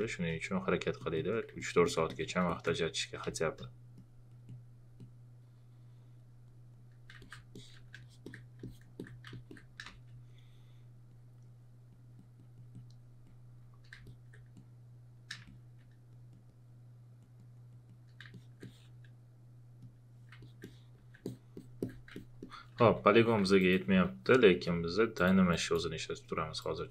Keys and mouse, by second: 0.0 space, 1.6 alt+click, 2.5 alt+shift+click, 3.2 space, 3.3 click, 9.1 alt+click, 9.8 space, 15.4 space, 15.4 click, 19.8 click, 21.2 alt+click, 22.5 alt+click, 22.8 shift+f, 23.6-26.9 alt+drag.